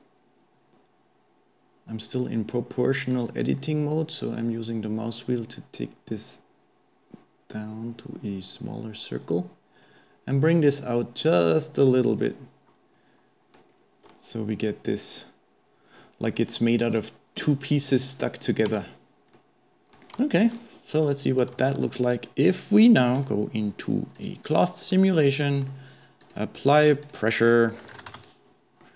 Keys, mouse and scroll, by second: 12.3-13.7 middle drag, 13.7-14.1 scroll down 2, 14.1-16.7 middle drag, 16.7-17.0 scroll up 2, 17.0-18.7 shift+middle drag, 18.7 Tab, 19.4-20.7 middle drag, 20.7-21.0 scroll down 2, 21.0-22.0 middle drag, 22.0-23.2 scroll up 2, 23.2 click, 24.2 drag, 24.9-26.4 middle drag, 26.4 click, 27.0-28.9 drag.